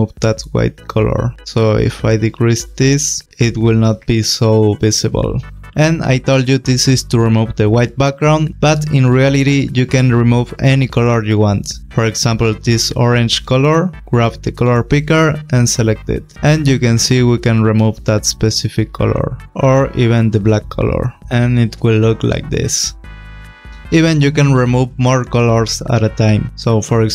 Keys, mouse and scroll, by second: 1.8 click, 14.4 click, 16.3 click, 20.4 click, 21.2 space.